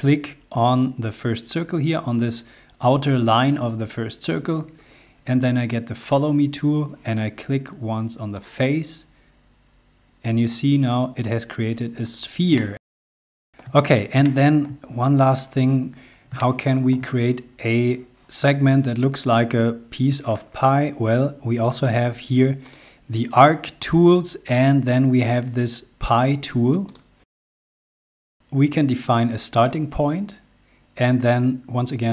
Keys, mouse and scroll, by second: 6.1 click, 8.3 click, 10.9-11.3 scroll down 1, 12.0 click, 12.3 space, 12.9 middle click, 13.8 shift+middle click, 14.7 scroll up 1, 16.0 shift+middle click, 22.4 click, 26.6 click, 29.3 click.